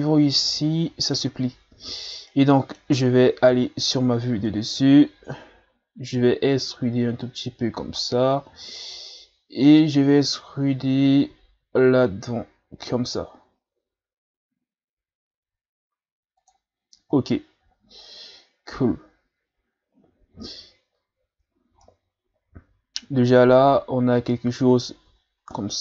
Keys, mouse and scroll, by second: 2.3-3.5 middle drag, 3.5 KP_7, 6.1 e, 11.3 e, 17.9-18.5 shift+scroll down 4, 20.0-20.9 scroll down 3, 20.9 scroll up 1, 21.6 ctrl+scroll down 1, 21.8-24.8 middle drag, 25.2-25.5 shift+scroll down 1, 25.5 middle click.